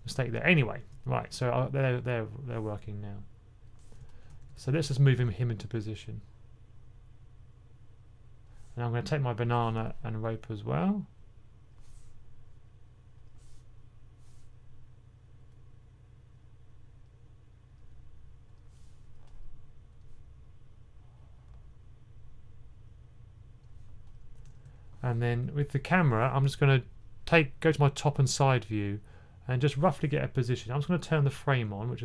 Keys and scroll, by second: 4.1-5.0 typing, 24.3 typing.